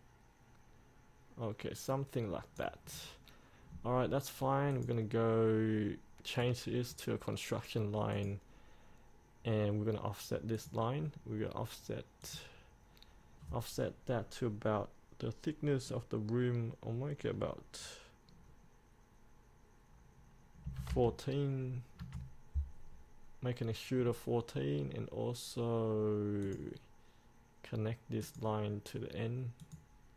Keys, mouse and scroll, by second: 3.1 scroll up 1, 4.9 click, 6.6-7.8 right drag, 8.3-11.8 drag, 20.8 KP_1, 24.2-26.6 scroll down 1, 26.6 click.